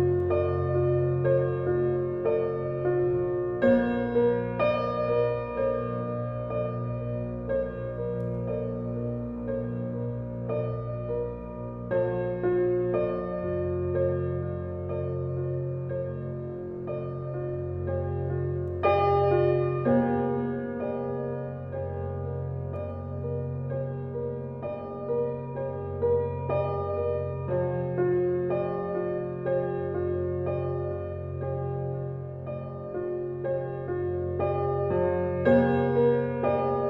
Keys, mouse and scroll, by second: 1.7-2.6 middle drag, 2.6 click, 2.7-3.1 scroll down 4, 3.1-4.0 middle drag, 4.0 click, 4.4 shift+click, 4.8 s, 6.2 g, 7.7 click, 7.8 scroll down 2, 8.1-8.7 middle drag, 8.7 click, 8.9-9.8 scroll up 7, 9.8 click, 10.3 click, 10.8 Tab, 11.7 click, 12.0 click, 12.2 scroll up 1, 12.5 shift+middle click, 13.1 alt+click, 13.9 alt+click, 14.6 alt+click, 15.7 alt+shift+click, 16.4-16.8 scroll down 7, 16.8 click, 17.2-19.3 drag, 19.7 scroll down 3, 19.9 scroll up 1, 20.2 click, 21.0 Tab, 21.3-21.6 scroll down 1, 21.6-23.1 middle drag, 23.6 scroll up 2, 23.9 middle drag, 24.1 Tab, 26.9 click, 27.4 alt+click, 28.2 alt+shift+click, 28.9 s, 30.2-31.4 scroll up 2, 31.4 alt+click, 32.0 g, 35.9 alt+click, 36.4 g.